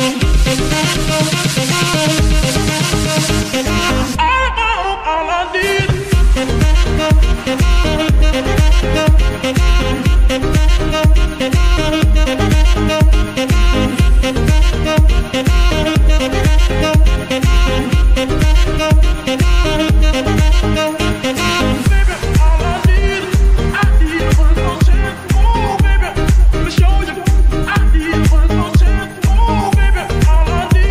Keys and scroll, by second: 2.3 g, 2.6 Escape, 3.3 g, 3.5 Escape, 4.7 g, 5.3 Escape, 6.8 F2, 7.9-9.0 typing, 9.2 Return, 11.5 shift+F2, 12.3 b, 12.4 a, 12.6 c, 13.1 Return, 23.7 g, 24.0 Escape, 29.3 KP_Divide.